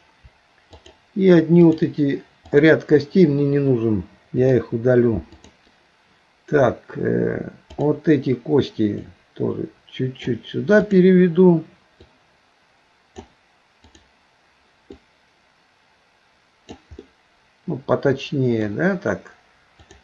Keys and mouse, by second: 0.8 shift+click, 1.6 shift+click, 2.5 shift+click, 7.7 click, 9.1-11.3 drag, 12.1-13.3 drag, 13.8 click, 15.0-16.8 drag, 17.0-18.7 middle drag, 19.8 click.